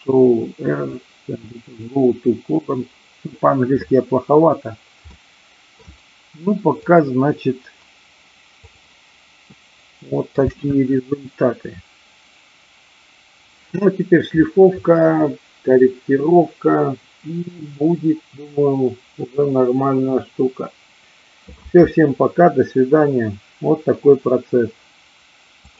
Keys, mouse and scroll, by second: 5.1 middle click, 6.8 click, 8.6 click, 9.5 middle click, 10.2 space, 25.6 click.